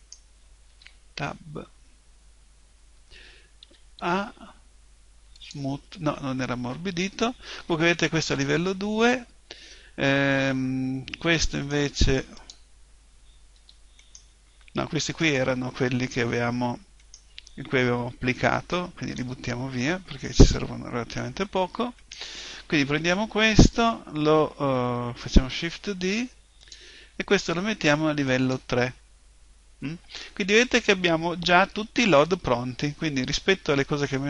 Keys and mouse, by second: 0.0 right click, 0.7 Tab, 1.8-3.1 middle drag, 3.6 a, 4.0 a, 5.4-7.3 drag, 11.6 right click, 12.4 click, 13.6 Tab, 14.0-18.8 right drag, 19.2 Delete, 22.0 right click, 23.8 middle click, 25.3 shift+d, 26.7-30.3 drag, 30.3-34.2 middle drag.